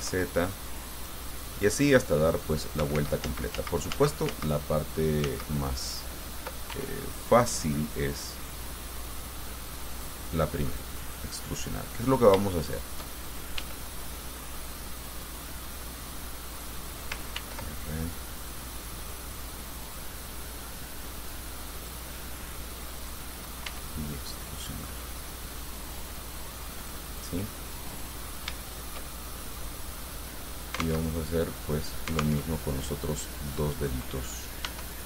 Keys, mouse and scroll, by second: 0.2 z, 1.5 click, 3.2 ctrl+z, 5.5 ctrl+z, 6.9 ctrl+e, 10.2 click, 11.2 right click, 12.0-13.4 middle drag, 13.8 e, 16.8 click, 17.6 ctrl+r, 18.6 click, 20.1-21.1 drag, 22.0 click, 23.2 right click, 23.9 e, 27.0 click, 27.5-28.8 middle drag, 28.8-30.7 shift+middle drag, 31.3 alt+Tab, 32.7 alt+Tab, 33.6 right click, 34.9 e.